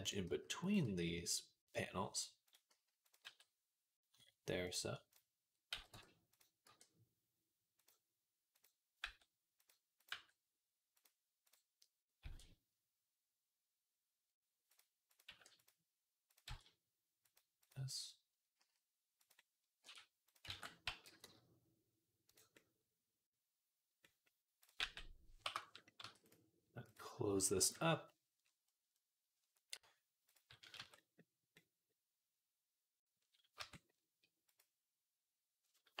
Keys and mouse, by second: 0.1 s, 0.7 g, 2.6 s, 3.1 g, 5.0 click, 5.6 x, 6.5 e, 7.6 middle click, 8.4 click, 8.9 g, 9.4 middle click, 9.8 click, 10.8 g, 11.3 click, 12.1 e, 14.5 click, 15.4 click, 16.3 e, 17.1 click, 17.7-20.4 drag, 18.4 s, 19.7 e, 20.4 ctrl+z, 20.4-24.5 middle drag, 20.7 a, 20.9 g, 24.5 click, 24.6-26.7 middle drag, 24.6 g, 25.8 e, 26.7-34.4 drag, 30.6 Tab, 33.4 Tab, 34.4-36.0 middle drag.